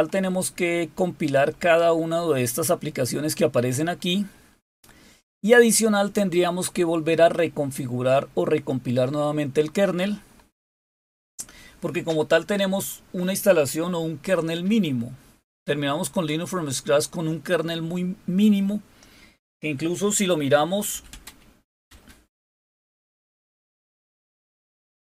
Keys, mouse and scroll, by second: 1.1-2.4 scroll up 2, 2.8-9.5 scroll up 6, 9.9-15.3 scroll up 3, 15.8 click.